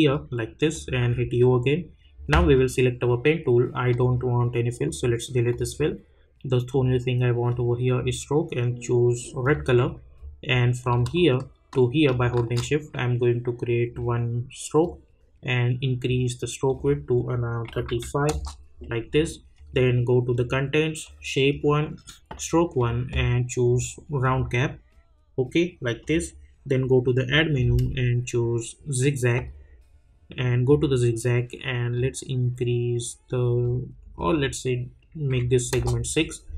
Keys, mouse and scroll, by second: 1.0 u, 2.5-9.4 drag, 12.1-16.6 shift+drag, 18.2 Return, 19.5 click, 24.9 click, 25.1-34.3 drag, 35.7 Return.